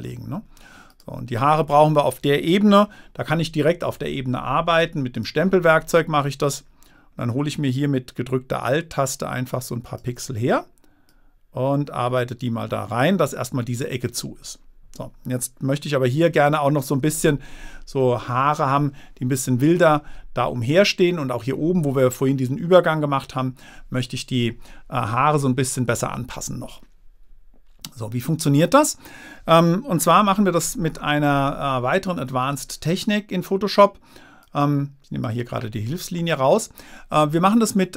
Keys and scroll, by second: 32.0 super+-.